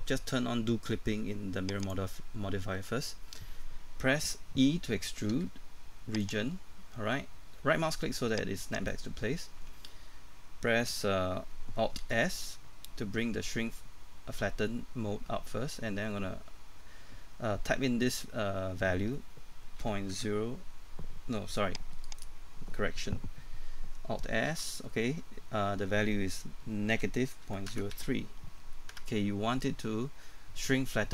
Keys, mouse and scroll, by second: 1.8 click, 5.3 e, 6.2 click, 8.7 right click, 12.0 alt+s, 19.8 KP_Decimal, 20.1 KP_0, 22.0 right click, 24.5 ctrl+alt+s, 27.4 KP_Decimal, 27.7 KP_0.